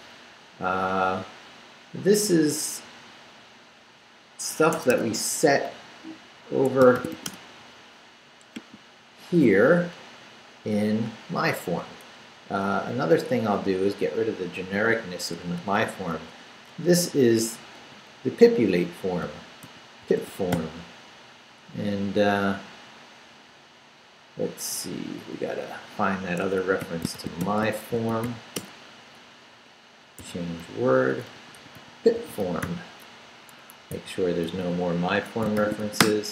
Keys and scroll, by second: 0.7 Right, 1.6 Right, 2.3 Left, 3.0 Left, 4.7 Escape, 6.5 Escape, 6.7-7.6 typing, 9.8 Up, 10.3 Up, 11.7 Up, 12.1 Down, 12.7 Left, 15.0-17.8 typing, 19.0-21.0 typing, 22.3 Down, 22.8 Down, 23.3 Down, 24.7 Up, 25.4 Up, 26.4 Escape, 26.6-28.7 typing, 30.2-33.9 typing, 33.5 Escape, 35.1 Escape, 35.6 shift+;, 35.8 shift+w, 36.0 Return.